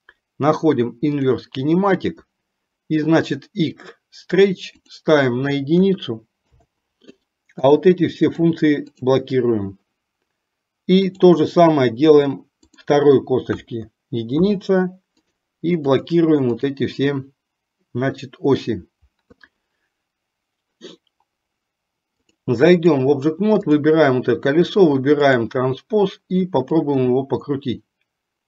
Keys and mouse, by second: 1.3 click, 5.2 click, 7.9 click, 11.1 click, 12.8 click, 15.5 click, 22.4-23.3 drag, 23.9 click, 25.4 click, 27.0-28.4 drag.